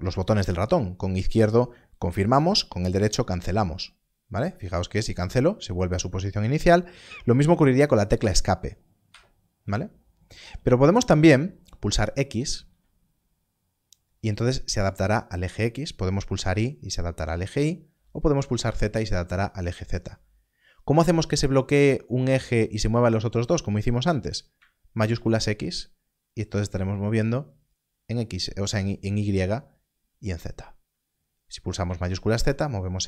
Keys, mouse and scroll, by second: 5.0 right click, 6.9 right click, 9.1 Escape, 10.5 Escape, 12.6 x, 16.4 x, 18.6 y, 24.5 z, 25.1 shift+x, 32.0 shift+z.